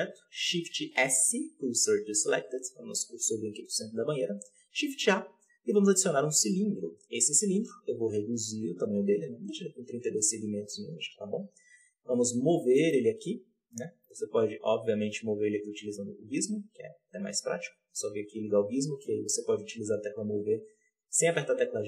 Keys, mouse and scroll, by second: 0.7-2.2 scroll down 1, 2.2 shift+s, 3.6 scroll up 1, 6.2 shift+a, 6.6-7.1 scroll down 4, 7.1 Tab, 8.0 s, 8.8-9.4 scroll up 5, 9.4 s, 10.1-10.7 scroll up 6, 10.7 s, 11.2 scroll down 1, 11.6 Tab, 12.3 g, 15.4-20.0 drag, 20.0 Escape.